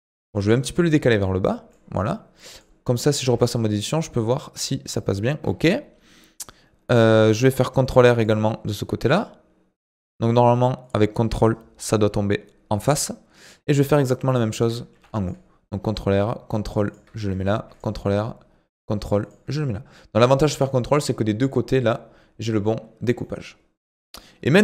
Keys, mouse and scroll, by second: 0.3 g, 2.5 click, 3.2 Tab, 7.8 ctrl+r, 14.9 ctrl+r, 17.5 ctrl+r, 23.2 middle click, 24.0 scroll down 2, 24.2-24.6 middle drag.